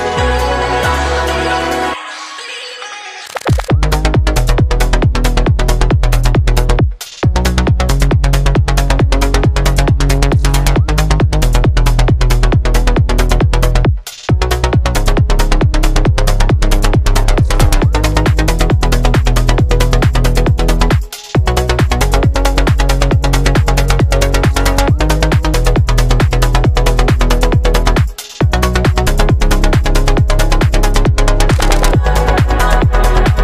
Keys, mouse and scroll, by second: 0.0 s, 2.3 KP_1, 2.7 shift+a, 4.4 middle click, 4.4 KP_0, 5.1 middle click, 5.5-7.6 drag, 6.2 middle click, 7.6 right click, 8.4-9.7 drag, 8.7 middle click, 9.7-12.5 right drag, 12.5-19.1 drag, 12.5 middle click, 19.1-20.9 middle drag, 19.9 n, 20.9 click, 20.9-21.8 middle drag, 21.8-30.2 drag, 22.8 BackSpace, 30.2-31.3 middle drag, 31.3-33.4 drag, 32.2 BackSpace.